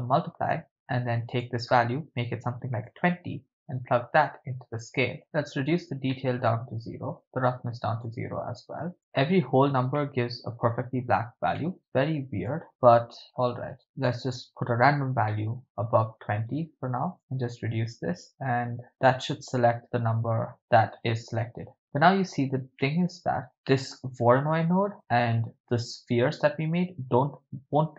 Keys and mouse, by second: 1.3-3.0 drag, 4.2-5.5 drag, 6.1-6.8 middle drag, 7.2 click, 9.0 2, 10.2 ctrl+middle click, 11.6 middle drag, 12.5 click, 12.6 middle click, 15.3 middle click, 17.2 click, 19.1 click, 22.8-23.4 middle drag, 23.5-23.9 shift+middle drag.